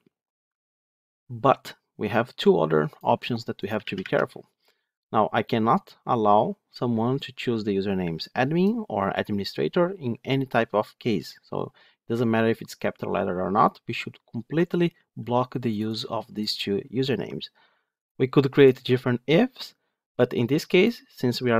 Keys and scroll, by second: 3.7 alt+1.